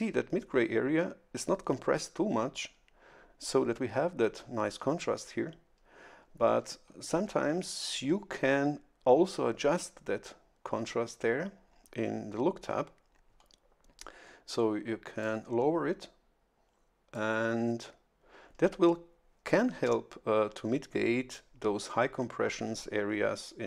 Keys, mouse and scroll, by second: 15.2-17.3 drag.